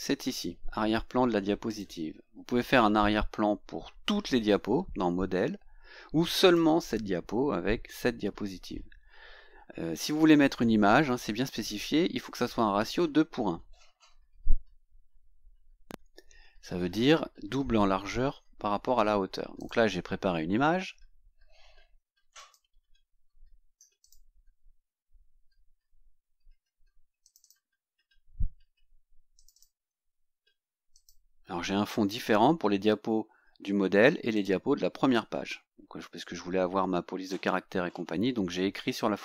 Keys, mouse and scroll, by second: 1.7 click, 6.4 click, 19.6 click, 22.4 click, 24.0 click, 27.2 click, 29.4 click, 30.9 click, 34.4 click.